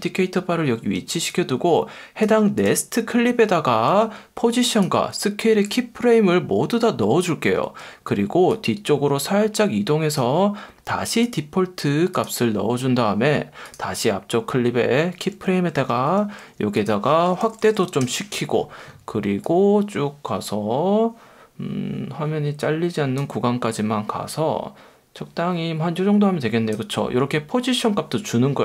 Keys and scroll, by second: 0.9 F1, 3.9 F1, 7.6 F1, 15.3 F1, 17.2-18.1 typing.